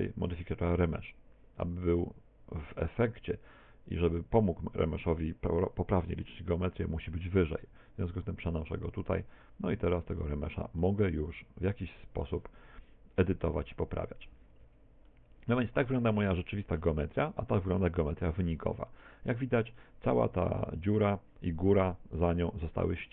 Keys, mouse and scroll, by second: 7.6 click, 10.2 click, 10.8 middle click, 14.6 Tab, 15.1 middle click, 17.0 Tab, 17.3 middle click, 19.1-19.7 scroll up 3, 19.7 shift+middle click, 22.2 middle click.